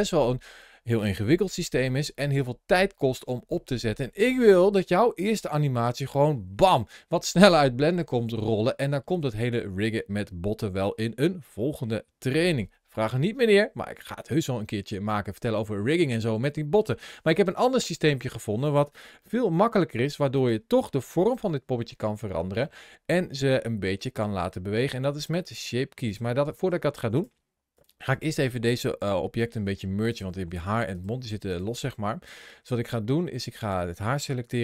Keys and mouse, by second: 15.4-16.6 middle drag, 19.1 shift+middle click, 19.5-20.0 middle drag, 20.7 shift+middle click, 22.4-24.3 middle drag, 24.8 middle click, 25.2 click, 27.6 click, 27.9 click, 28.8 g, 29.2 right click, 30.3 g, 30.7 right click, 33.4 click.